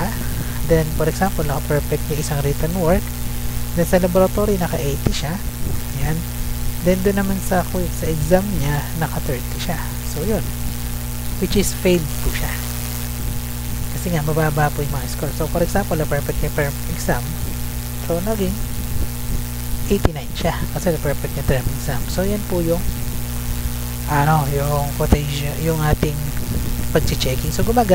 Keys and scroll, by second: 0.0 Right, 1.1 2, 1.4 5, 1.9 Right, 4.3-5.2 typing, 5.6 Right, 8.9-9.8 typing, 9.9 Right, 11.2 Left, 11.6 Right, 13.8 Left, 15.4-16.3 typing, 17.5 Left, 18.0 Right, 20.6 Left, 22.0 Right, 27.1 Left.